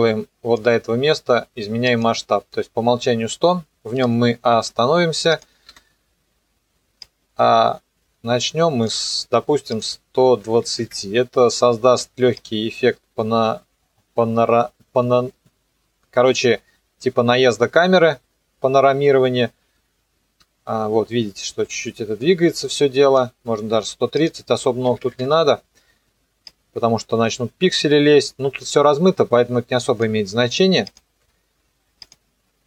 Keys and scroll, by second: 4.1 u, 5.7 F9, 10.5 KP_2, 24.9 KP_1, 25.0 KP_3, 25.1 KP_Enter.